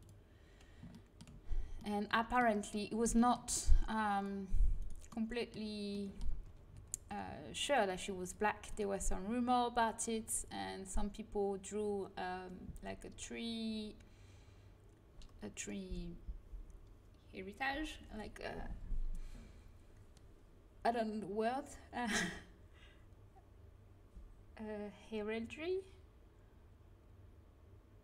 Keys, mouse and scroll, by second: 1.2 middle click, 2.2-3.3 middle drag, 4.0-5.8 drag, 4.7-5.8 right drag, 5.8 middle click, 6.2 z, 6.6 c, 6.9 middle click, 8.7-11.2 right drag.